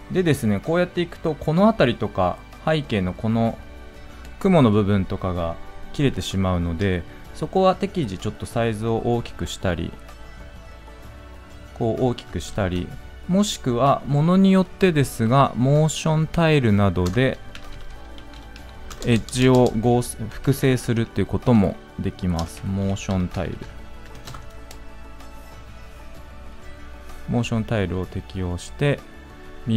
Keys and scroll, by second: 12.3 ctrl+z.